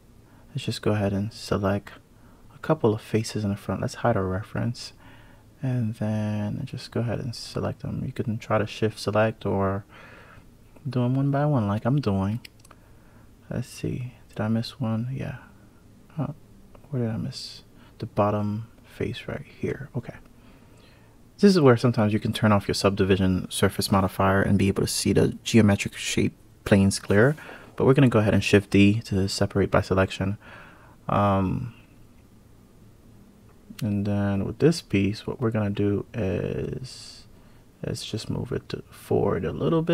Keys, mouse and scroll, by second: 1.8 shift+click, 1.9 click, 3.3 shift+click, 3.8 shift+click, 4.4 shift+click, 5.1 shift+click, 5.6 shift+click, 6.0 shift+click, 6.5 shift+click, 6.9 shift+click, 7.2 shift+click, 7.6 shift+click, 8.0 shift+click, 8.4 shift+click, 8.7 shift+click, 9.1 shift+click, 9.8 shift+click, 10.1 shift+click, 10.9 shift+click, 11.1 shift+click, 11.5 shift+click, 12.5 click, 19.2 shift+click, 20.6 click, 22.3 shift+d, 23.2 p, 26.2 click, 26.9 click, 28.6 click, 29.0 Tab, 29.4 click, 29.8 drag, 30.2 click, 30.8 KP_Divide, 31.5 click, 32.3 click, 33.7 click, 36.1 g, 38.0 click, 38.7 click, 39.6 click.